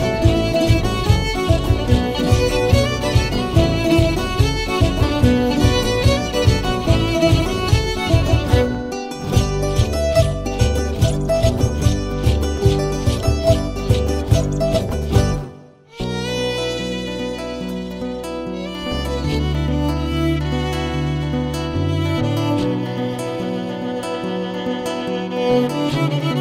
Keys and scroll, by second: 0.3 ctrl+s, 0.3 e, 0.3 space, 1.7 ctrl+s, 1.7 e, 1.7 space, 2.1 space, 3.1 ctrl+s, 3.1 e, 3.1 space, 3.5 ctrl+s, 3.5 e, 3.5 space, 4.6 ctrl+s, 4.6 e, 4.6 space, 25.4 ctrl+s, 25.4 e, 25.4 space.